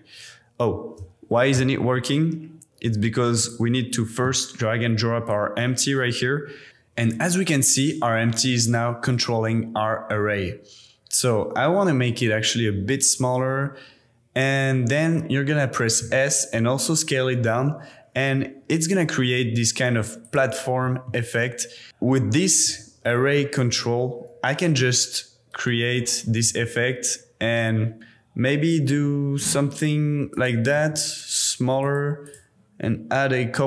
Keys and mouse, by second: 9.1 click, 10.1 g, 10.3 z, 16.0 s, 20.2 click, 21.1-21.9 middle drag, 22.5 g, 22.7 z, 26.4 s, 30.3 click, 30.7 g, 30.8 z, 31.8 click, 32.2 click.